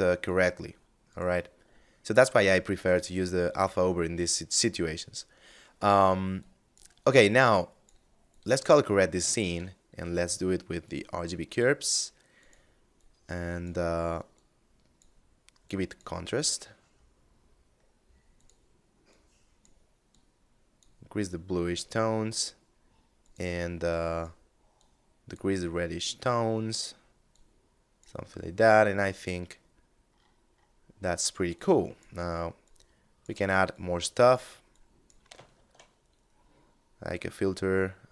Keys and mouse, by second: 0.2 click, 0.7 x, 1.5 ctrl+shift+click, 2.3 middle click, 4.8 middle click, 5.6 click, 8.6 shift+a, 10.0 click, 16.2 middle click, 17.5 click, 26.4 click, 27.5 middle click, 30.0 middle click, 30.7 click, 34.7 shift+a.